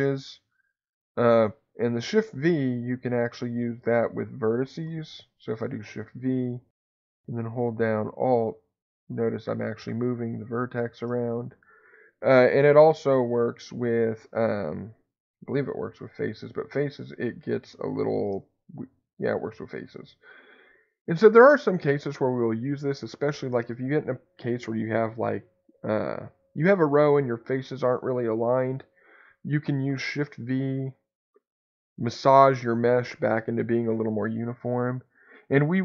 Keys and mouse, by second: 5.8 shift+v, 13.2 Escape, 13.8 3, 18.1 shift+v, 23.3 Escape.